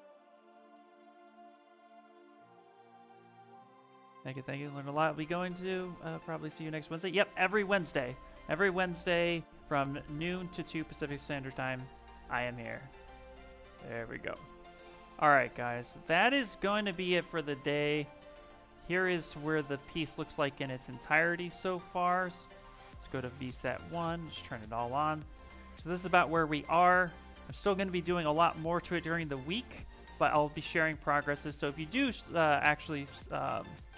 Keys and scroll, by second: 13.8 Escape.